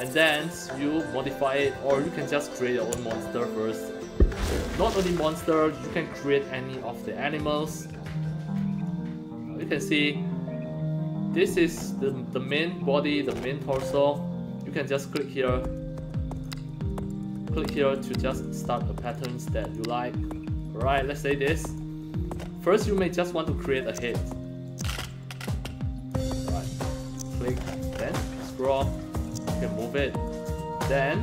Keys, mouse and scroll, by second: 0.7-1.3 scroll up 2, 1.7 scroll up 1, 2.6 click, 7.6 alt+click, 8.8 click, 11.4-11.9 scroll up 2, 13.0 scroll up 1, 13.5 scroll down 1, 14.9 click, 16.3 click, 17.4 click, 17.9 click, 19.0 click, 19.5 click, 21.1 click, 22.0 scroll up 1, 23.7 click, 24.6-26.1 drag, 27.0 click, 27.3-28.2 scroll up 3, 29.2-30.4 drag, 30.7-31.0 scroll up 2.